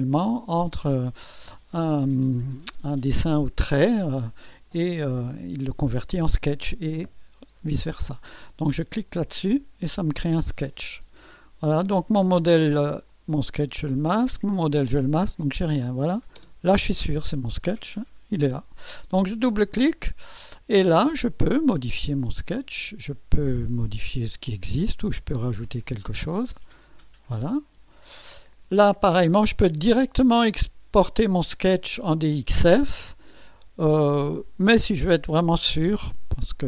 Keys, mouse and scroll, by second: 9.1 click, 13.1 click, 13.7 space, 14.4 click, 14.9 space, 15.9 click, 16.4 space, 19.4 click, 20.8-21.1 scroll up 2, 21.4 scroll down 1, 23.9 click, 25.6 click, 26.7 click, 27.9 click.